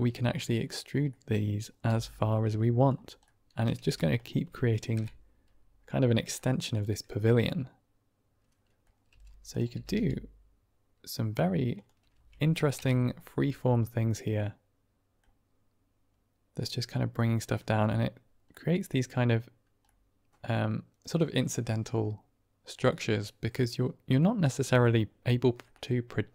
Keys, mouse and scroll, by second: 0.0 click, 1.0 click, 1.8 e, 2.7 click, 3.2 click, 3.7 g, 4.1 click, 5.2 Right, 6.3-7.5 middle drag, 7.5-8.8 drag, 9.0 g, 9.4 click, 9.6 r, 9.8 r, 11.6 click, 12.0 Tab, 13.0 Right, 13.6-15.1 middle drag, 16.5-17.4 middle drag, 18.4-18.8 middle drag, 19.8-20.9 middle drag, 22.8-24.1 middle drag.